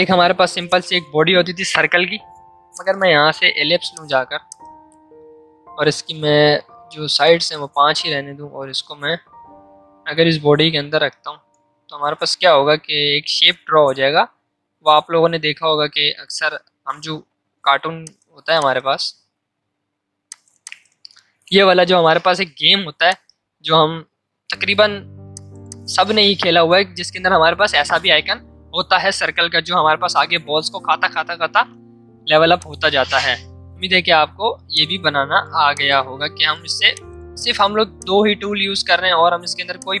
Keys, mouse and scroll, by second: 5.7 Up, 6.9 Down, 8.6 space, 10.7 space, 14.8 space, 17.5 v, 17.9 space, 18.0 click, 22.3 l, 23.1 click, 24.2 v, 25.3 click, 32.1 v, 32.5-34.7 drag, 34.7-36.9 shift+drag, 36.9-40.0 drag.